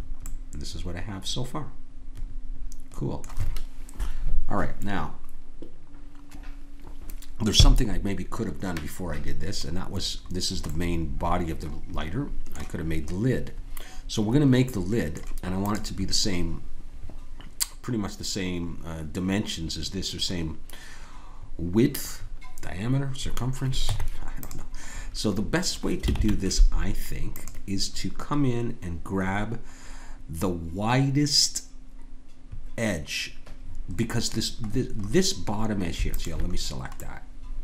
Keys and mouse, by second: 0.0 middle click, 10.7-15.6 middle drag, 15.6-21.0 drag, 23.8 Tab, 25.4 middle click, 26.1 ctrl+Tab, 34.8-36.1 middle drag, 36.1-37.6 drag.